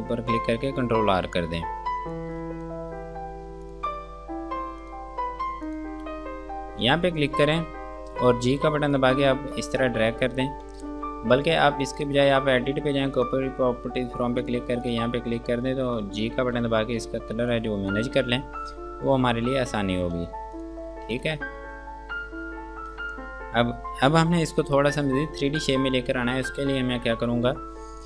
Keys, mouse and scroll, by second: 0.1 ctrl+r, 2.4 alt+click, 3.9 click, 8.7 g, 9.2 click, 10.9 ctrl+space, 12.1 click, 16.7 g, 17.8 click, 18.9 click, 20.4 space, 20.8 click.